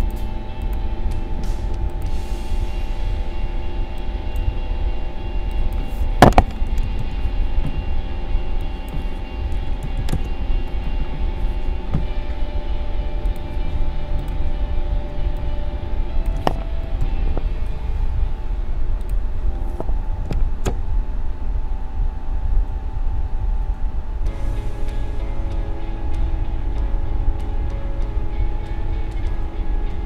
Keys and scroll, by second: 6.4 2, 9.5 1, 10.1 Return, 15.1 space, 17.0 ctrl+0, 20.6 shift+Right.